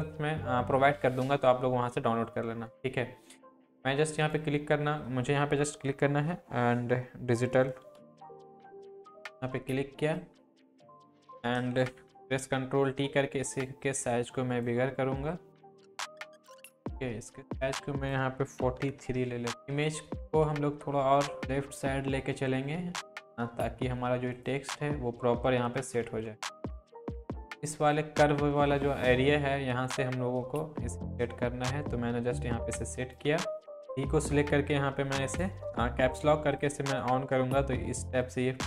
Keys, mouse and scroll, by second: 4.2 click, 7.7-9.2 typing, 9.2 click, 12.2 ctrl+t, 13.0-13.8 drag, 16.6-18.2 drag, 20.2 Left, 24.6 Left, 25.4 Down, 25.8 Left, 26.4 Down, 26.8 ctrl+t, 27.0 click, 31.0-33.2 drag.